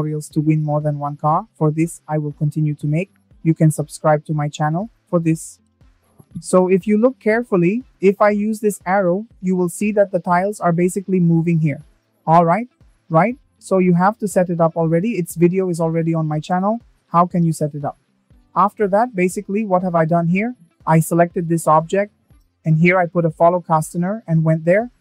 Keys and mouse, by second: 13.5 click.